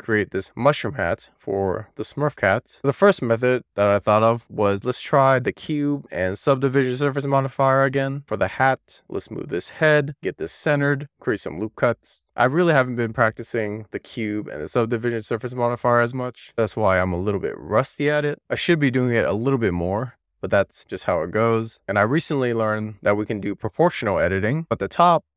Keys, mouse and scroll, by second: 2.9 shift+a, 4.1 e, 4.5 click, 5.6 w, 7.6 click, 7.9-8.5 scroll up 1, 8.5-8.9 scroll down 1, 8.9 Tab, 9.0 click, 11.0 Tab, 11.1 ctrl+r, 11.4 right click, 11.7 ctrl+r, 13.6 alt+z, 14.2 alt+z, 14.7 alt+z, 15.3 click, 16.7 click, 18.4 alt+z, 19.5 alt+z, 19.9 alt+z, 21.6 super+z.